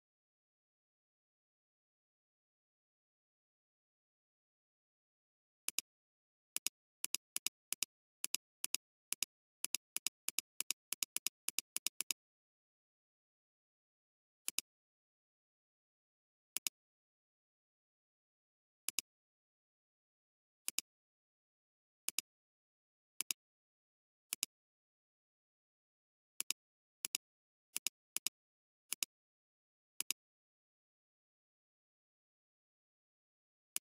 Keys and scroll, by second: 2.6-3.9 typing, 18.7 alt+space, 19.2 space, 20.6 alt+space, 21.4 alt+space, 22.0 alt+space, 25.9 ctrl+x, 27.0 space.